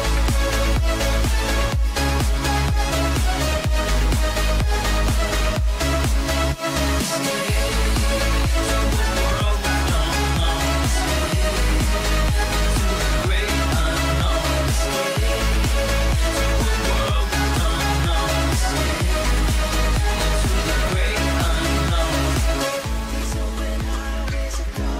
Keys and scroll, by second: 7.5 ctrl+g, 8.2 ctrl+alt+shift+e, 19.1 ctrl+shift+a.